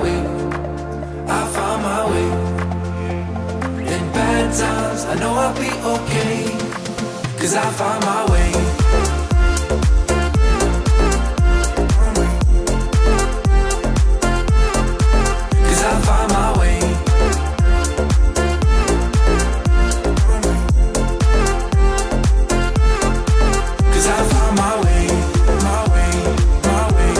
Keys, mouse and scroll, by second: 1.1 click, 1.1 typing, 1.3 click, 4.5 click, 5.1 typing, 8.2 click, 13.7 click, 16.3 click, 24.6 click.